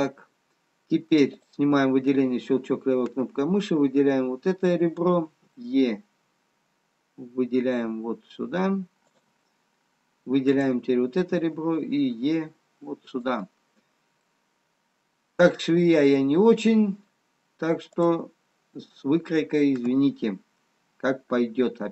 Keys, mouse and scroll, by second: 2.8 click, 10.5 click, 11.7 e, 15.0 middle click, 18.2 click.